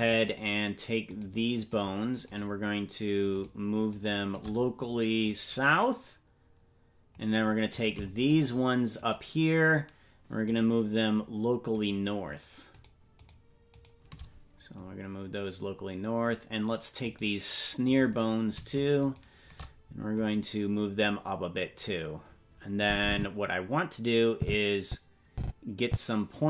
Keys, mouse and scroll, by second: 0.2 shift+right click, 2.4 right click, 4.4 shift+right click, 5.2-7.1 drag, 7.9 right click, 8.4 shift+right click, 10.2 right click, 12.8-14.7 shift+right drag, 14.7-16.2 drag, 17.2 right click, 18.0 right click, 19.1 shift+right click, 19.7 shift+right click, 20.1-21.6 drag, 22.8-26.4 drag.